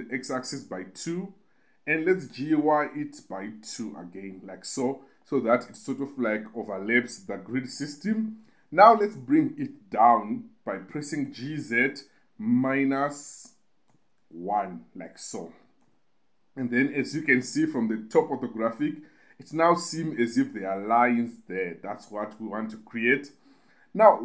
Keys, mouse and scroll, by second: 1.0 2, 1.8 click, 2.4 g, 2.7 y, 3.7 2, 4.6 click, 8.5 KP_2, 8.8 KP_2, 9.0 KP_2, 9.1 KP_2, 11.6-14.6 typing, 15.5 click, 16.1 KP_7.